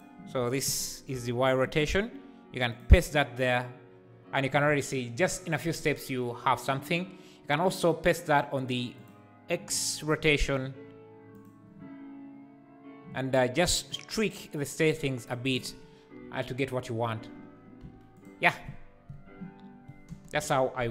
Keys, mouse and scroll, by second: 0.4 a, 1.1 KP_Decimal, 2.7-5.7 drag, 8.5 click, 9.0 click, 11.3-17.2 drag, 17.3-17.7 scroll down 5, 17.8 x, 20.1 space, 20.3 KP_0.